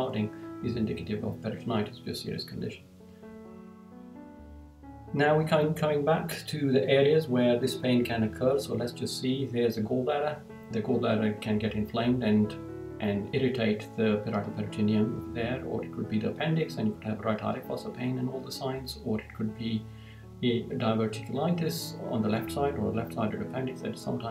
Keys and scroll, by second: 3.6 Down.